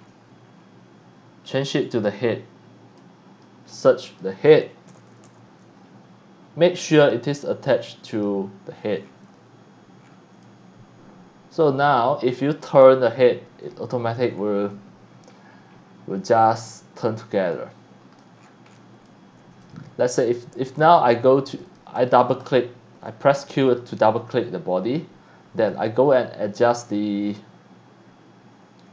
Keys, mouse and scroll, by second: 0.0 scroll down 1, 0.5 scroll down 1, 1.4 scroll up 1, 3.0-3.4 drag, 4.1 click, 4.7-5.7 typing, 7.0 click, 8.1 click, 9.0 scroll down 1, 10.0 scroll down 1, 10.4-11.5 alt+drag, 13.1 middle click, 14.3 scroll down 2, 15.3-15.8 scroll up 2, 16.3 alt+click, 17.5 alt+click, 18.4-18.8 scroll down 2, 19.0 x, 19.1 alt+click, 21.5 click, 21.6 click, 22.0 click, 22.2 click, 22.4 click, 23.5 click, 23.7 click, 24.3 scroll down 1, 25.7 click.